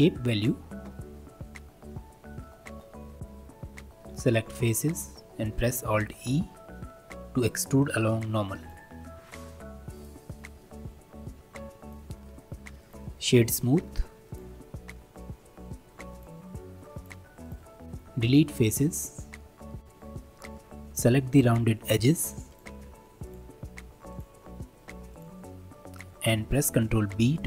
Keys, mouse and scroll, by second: 3.2 click, 4.1 3, 4.5-6.0 middle drag, 6.0 alt+e, 10.2 middle click, 10.8 Tab, 11.0-11.4 scroll down 1, 11.4-11.8 shift+middle drag, 11.8-14.3 right drag, 14.3 click, 15.5-16.1 scroll down 1, 16.1-17.1 drag, 17.5 click, 17.8 shift+middle drag, 18.1 x, 19.4 middle click, 19.8 click, 22.5 alt+click, 23.2 alt+shift+click, 24.1 alt+shift+click, 25.1 alt+shift+click, 27.0 ctrl+b.